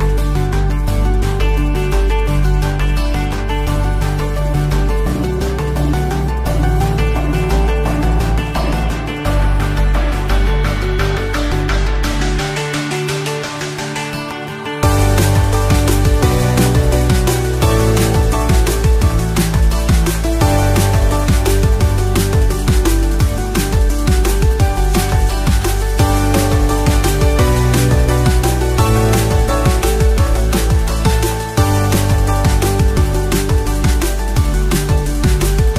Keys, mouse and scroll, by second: 0.9 click, 2.0 2, 2.2 click, 2.6 alt+click, 3.2-4.0 scroll up 3, 4.4 e, 5.1 right click, 6.0 s, 7.8 click, 8.8-12.6 drag, 18.3 click, 18.6 alt+click, 19.7 ctrl+b, 22.4 click, 23.5-24.8 drag, 25.4-25.7 scroll up 1, 26.1 middle click, 27.1 click, 27.4 alt+click, 28.1 alt+shift+click, 28.5 alt+shift+click, 29.5 alt+shift+click, 30.2 alt+shift+click, 31.1 alt+shift+click, 31.9 alt+shift+click, 32.6 alt+shift+click, 33.3 alt+shift+click, 33.9 alt+shift+click, 34.6 alt+shift+click, 35.3 alt+shift+click.